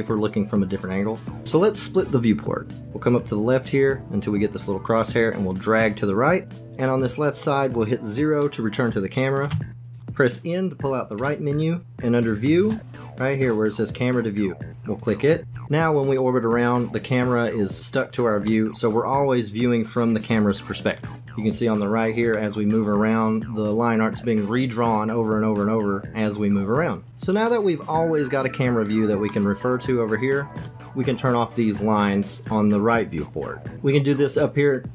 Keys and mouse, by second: 1.4 middle click, 5.2-6.6 drag, 7.4 click, 9.4 KP_0, 9.9 shift+click, 11.1 n, 12.5 click, 15.0 click, 15.5 n, 18.4-19.9 drag, 19.9-21.0 middle drag, 22.5-25.8 drag, 25.8-27.1 middle drag, 27.2 click, 28.1 middle click, 29.4-30.4 drag, 30.4 middle click.